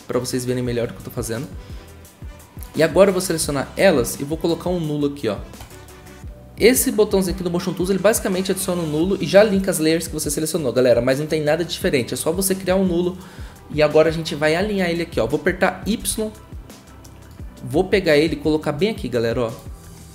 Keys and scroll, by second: 16.0 y.